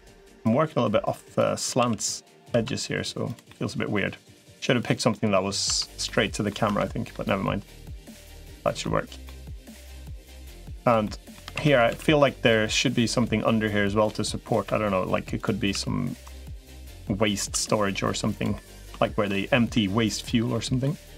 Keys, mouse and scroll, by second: 0.3-1.3 drag, 1.7 s, 3.3-4.3 middle drag, 4.9 middle click, 5.5 Tab, 5.8 middle click, 6.5 Tab, 6.6 middle click, 8.2 middle click, 9.0 middle click, 9.5 click, 9.8 middle click, 10.5 3, 10.8 middle click, 11.3 shift+d, 11.7 s, 12.4 middle click, 13.9 click, 14.5 e, 15.5 s, 16.5 e, 17.3 s, 18.3 middle click, 18.8 shift+middle click, 19.1 middle click, 20.3 middle click, 21.0 middle click.